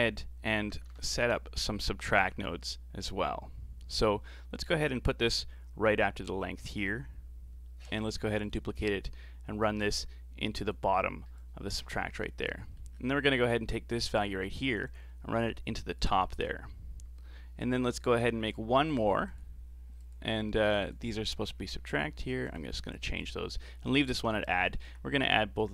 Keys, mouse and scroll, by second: 7.9 shift+d, 9.6 click, 11.4 click, 12.5 middle click, 12.9-14.2 scroll down 4, 14.2 click, 17.2-17.9 scroll up 3, 17.9 click, 18.4 shift+d, 19.3-24.7 drag, 24.7-25.7 alt+right drag.